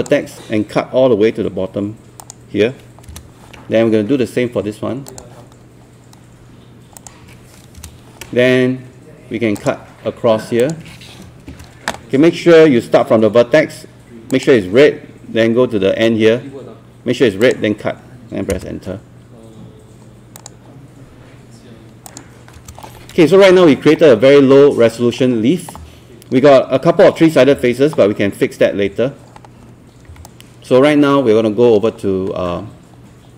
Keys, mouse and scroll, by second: 0.0 click, 3.1 Return, 5.1 click, 7.8 Return, 9.6-11.5 drag, 11.5 Return, 14.3 click, 18.5 Return, 20.4 click, 22.6 Return, 23.5-24.0 scroll down 1, 24.0-24.6 scroll up 1, 30.1 q, 30.3-33.3 right drag.